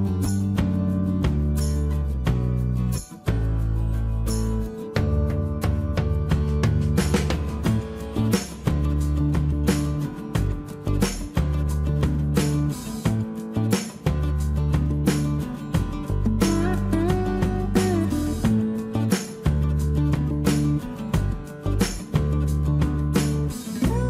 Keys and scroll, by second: 7.7 shift+space, 9.7 m, 10.6 space, 16.0 shift+m, 17.6 space, 20.2 q, 22.1-23.3 typing.